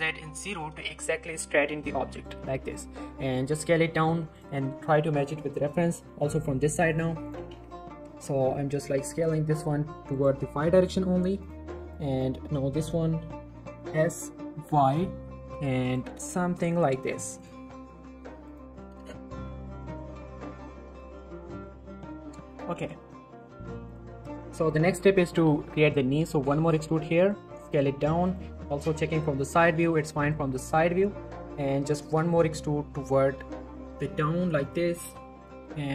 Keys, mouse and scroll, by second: 1.3 z, 1.7 scroll up 1, 2.1 shift+middle click, 3.2 s, 4.3 click, 6.1 z, 6.9 click, 7.5-8.6 typing, 10.1 click, 10.4 typing, 11.4 click, 12.7 d, 13.7 s, 14.6 y, 15.8 click, 16.0 g, 17.4 click, 17.9 s, 18.5 click, 19.4 z, 19.6 scroll down 1, 20.0 Tab, 20.5 shift+middle click, 21.0 click, 21.3-22.0 scroll up 2, 22.0 click, 22.1 Tab, 22.5 shift+middle click, 22.6-23.9 scroll up 2, 22.7 z, 22.9 shift+middle click, 23.9 click, 24.8 scroll down 1, 25.0 shift+middle click, 25.2 shift+scroll up 1, 25.3 e, 25.5 z, 27.5 s, 28.2 click, 29.1-29.5 scroll up 1, 29.8 r, 30.2 click, 30.3 g, 30.7 click, 33.0 click, 33.4 e, 34.6 click, 35.5 shift+middle click, 35.6 shift+scroll up 1, 35.8 g.